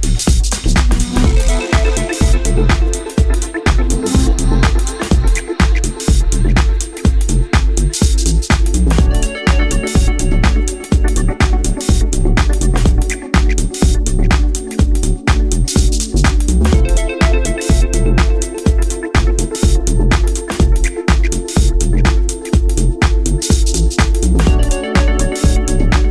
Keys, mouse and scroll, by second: 4.5-5.4 scroll down 3, 5.8 click, 9.0 a, 9.8 z, 12.0-12.6 scroll down 2, 12.6 scroll down 2, 12.8 b, 16.3 scroll up 1, 17.2 shift+middle click, 17.2 scroll up 6, 17.6 scroll down 1, 17.7 scroll up 2, 18.0 scroll down 1, 18.6-19.1 scroll up 1, 19.7 alt+right click, 20.7 x, 22.0-23.2 scroll down 14, 22.9 scroll up 1, 23.2 shift+middle click, 23.7-24.4 scroll up 1, 24.5-25.1 scroll up 9, 25.1 shift+middle click, 25.8-26.1 scroll up 2.